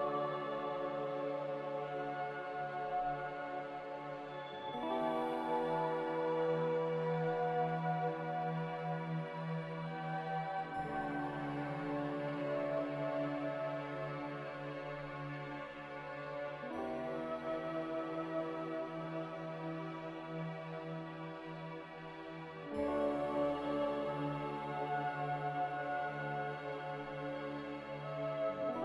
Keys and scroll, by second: 1.3 Delete, 3.3-5.6 typing, 7.0 a, 10.0-11.6 typing, 17.8 z, 19.5 5, 19.6-21.8 Return, 26.1-27.0 typing.